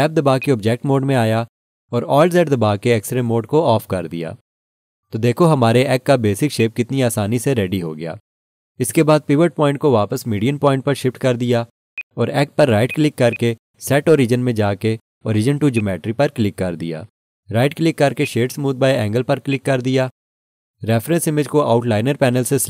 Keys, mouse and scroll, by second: 0.4 click, 1.2 Tab, 2.4 alt+z, 6.6 alt+click, 11.9 click, 13.3 right click, 15.7 right click, 15.9 click, 18.2 right click, 19.5 right click, 21.4 click.